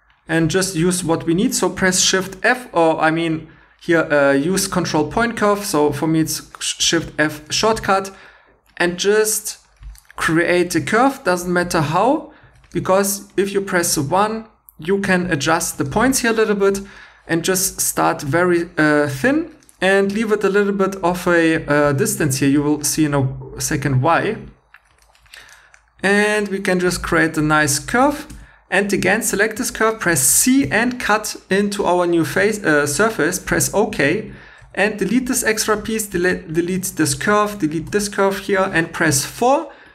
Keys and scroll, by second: 12.4 1, 28.0 typing, 30.6 c, 34.6 Tab, 35.0-36.5 typing, 37.9 x.